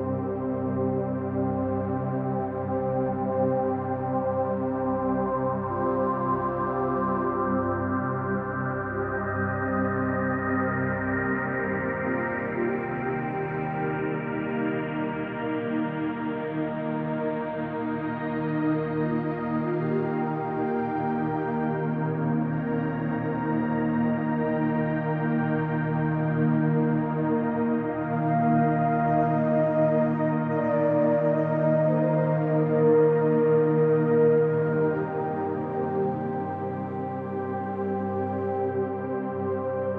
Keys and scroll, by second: 19.8 space, 20.4 space, 25.4 ], 25.9 ].